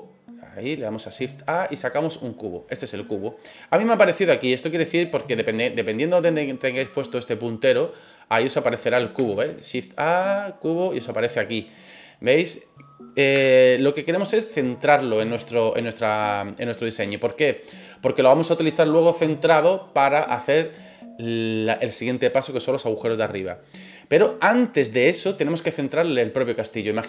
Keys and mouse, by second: 3.0-3.3 middle drag, 5.4 click, 7.1 click, 8.0 click, 8.6 click, 9.3 shift+a, 11.2-11.6 middle drag, 12.3 right click, 13.3 Delete, 15.3-16.3 middle drag, 26.2 right click, 26.7 middle drag.